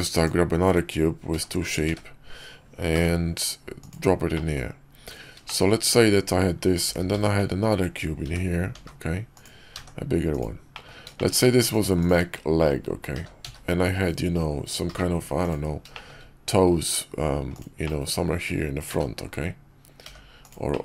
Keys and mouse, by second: 1.2 g, 4.2 click, 5.3 shift+click, 6.8 shift+d, 9.6 s, 10.6 click, 11.0 shift+drag, 11.9 shift+click, 13.0 g, 15.8 shift+click, 17.7-18.2 middle drag, 18.8 `, 19.9 g, 20.6-20.8 middle drag.